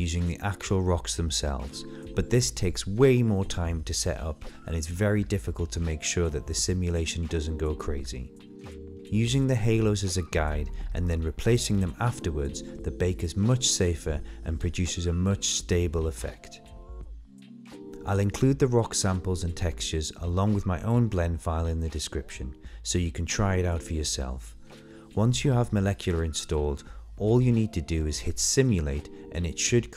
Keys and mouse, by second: 3.0 click, 4.4 click, 5.1 click, 8.5 click, 10.7-11.6 middle drag, 16.8 click, 21.1 click, 22.0 click, 29.6 click, 29.8 middle drag.